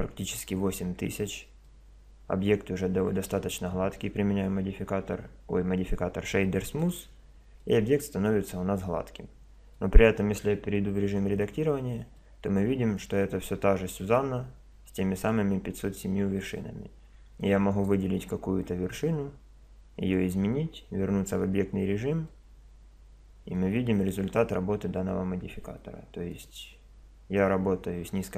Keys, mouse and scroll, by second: 1.6-3.6 middle drag, 6.8-8.6 drag, 7.8 middle click, 8.6 middle click, 11.1 Tab, 12.2 click, 14.0 click, 17.7-19.0 right drag, 19.0 middle click, 19.4-20.8 drag, 20.8 middle click, 21.3 Tab, 22.3-24.0 drag, 24.0 middle click, 25.6 Tab, 26.3-27.4 right drag, 27.4-28.3 drag.